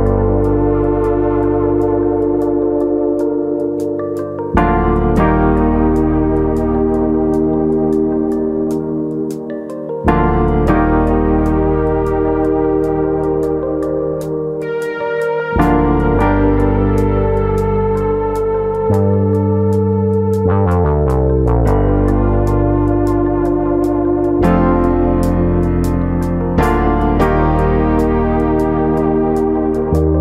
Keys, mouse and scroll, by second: 0.0 alt+shift+click, 1.4 middle click, 1.9 shift+click, 2.1 middle click, 3.2 shift+click, 3.6 middle click, 4.9 ctrl+z, 5.2 ctrl+z, 5.5 middle click, 6.2 shift+middle click, 6.8-7.2 scroll down 1, 7.2 middle click, 7.5 shift+middle click, 7.8 middle click, 8.6-9.2 scroll up 3, 8.8 shift+middle click, 9.2 middle click, 9.7 shift+click, 10.1 middle click, 10.9 ctrl+click, 11.3 alt+shift+click, 11.6-12.1 scroll down 6, 12.1 middle click, 13.0 ctrl+e, 13.8 scroll down 2, 14.0 shift+middle click, 14.3 middle click, 14.5 Tab, 14.8-15.4 scroll down 3, 15.1 shift+middle click, 15.4 middle click, 16.0 scroll down 1, 16.2-16.7 scroll up 3, 16.5 shift+middle click, 16.7-17.3 scroll down 4.